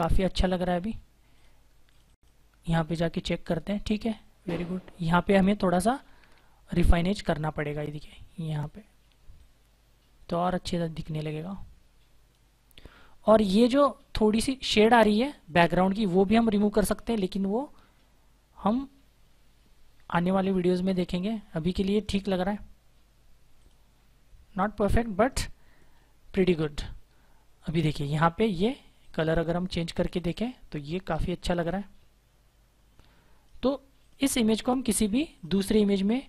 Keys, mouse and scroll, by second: 5.5-5.9 typing, 7.9-8.6 typing, 9.2 click, 16.1 typing, 16.7 click, 23.4 click, 28.9 click.